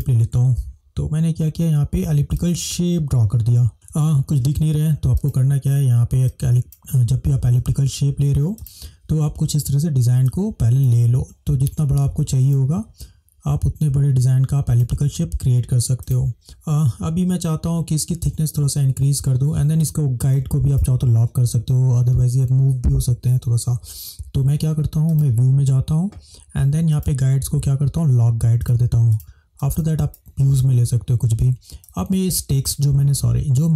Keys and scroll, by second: 0.7 ctrl+-, 10.3 space, 16.4 space.